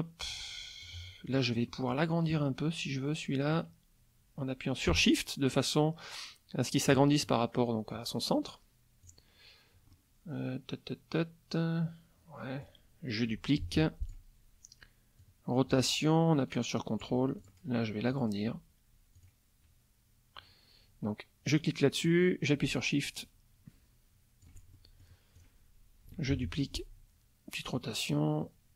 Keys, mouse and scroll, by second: 1.2 click, 1.6 middle click, 3.5-7.1 drag, 9.0 click, 9.9-12.9 middle drag, 13.6 ctrl+d, 14.0 ctrl+click, 15.2-17.2 drag, 17.4 ctrl+click, 18.1 click, 19.1 click, 22.0-24.6 drag, 24.7 shift+click, 25.3 shift+click, 26.3 ctrl+d, 26.6 ctrl+click, 27.6-28.7 drag.